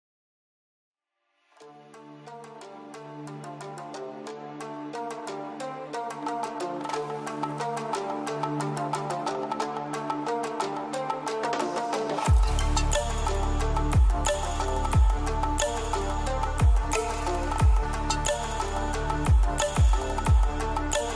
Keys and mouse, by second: 0.3-1.0 middle drag, 1.6-3.3 drag, 3.8 click, 4.0 click, 4.9 middle click, 6.3 middle click, 9.1-10.3 middle drag, 11.1 middle click, 12.5-14.2 middle drag, 15.7 shift+middle click, 16.0-16.8 middle drag, 18.4 s, 18.6 x, 20.6 KP_0.